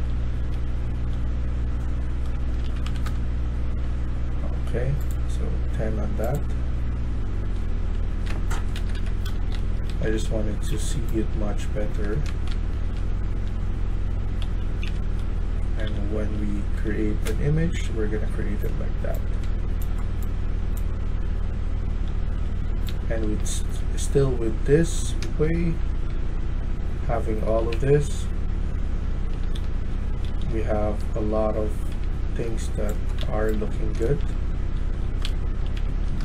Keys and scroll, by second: 0.0-0.7 typing, 2.4 ctrl+a, 2.4-3.2 typing, 6.8-16.9 typing, 8.6 Escape, 8.9 Escape, 22.7-23.7 typing, 24.9-25.6 typing, 28.0-36.2 typing.